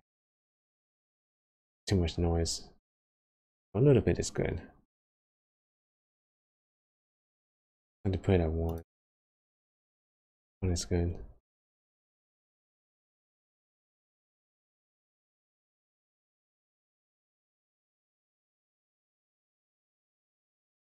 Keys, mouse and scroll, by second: 2.2 space, 8.9 click, 10.5 space, 13.4 space, 14.3 click, 14.6-15.7 scroll down 8, 15.7 middle click, 17.3 scroll down 3, 18.0 space.